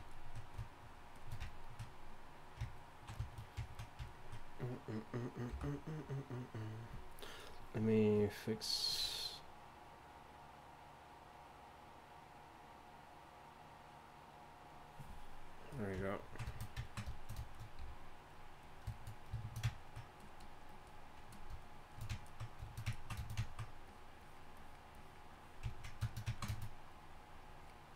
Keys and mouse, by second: 18.3 f, 19.8 f, 25.7 click.